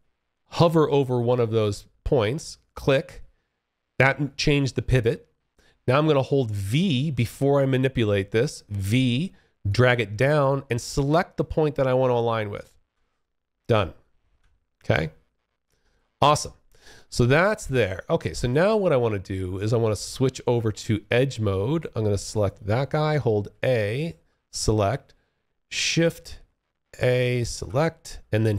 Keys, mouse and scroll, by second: 8.0-11.9 v, 13.4 Escape, 14.1 alt+click, 15.0 alt+right click, 16.0 alt+click, 17.5 alt+click, 21.5 click, 22.6 a, 23.0 click, 23.1 a, 24.9 shift+click, 25.6-26.7 shift+a, 28.1 b.